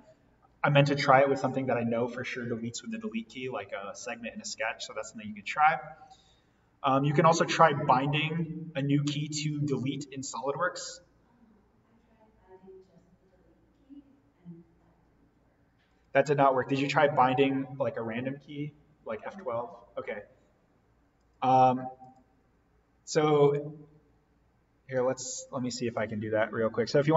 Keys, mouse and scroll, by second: 15.8 click, 21.1 click, 26.1 click.